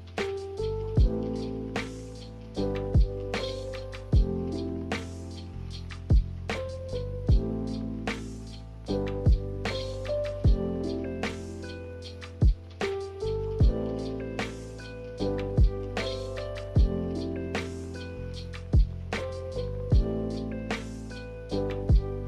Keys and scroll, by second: 5.4 Delete.